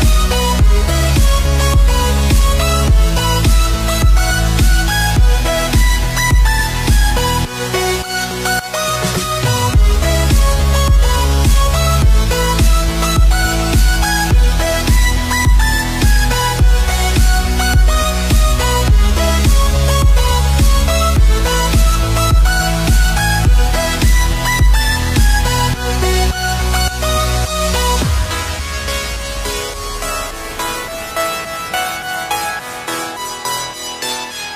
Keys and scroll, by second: 33.5 ctrl+=.